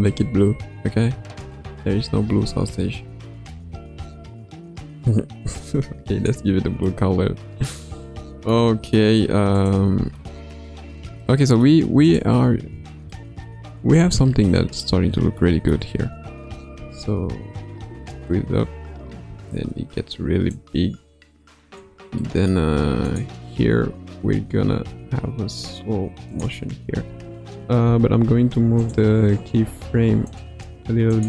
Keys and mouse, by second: 6.9-7.7 middle drag, 8.5-9.5 middle drag, 9.5 click, 10.1-10.5 shift+middle drag, 11.2-12.0 middle drag, 12.0 click, 12.6 ctrl+Tab, 13.1-13.5 middle drag, 13.8 KP_1, 14.5-14.8 middle drag, 15.4-15.7 middle drag, 16.7 space, 19.2 space, 20.5-21.7 drag, 22.2 middle click, 23.0 click, 24.0 r, 27.0 a, 27.8 i, 28.7 click, 29.6 g, 31.1 click.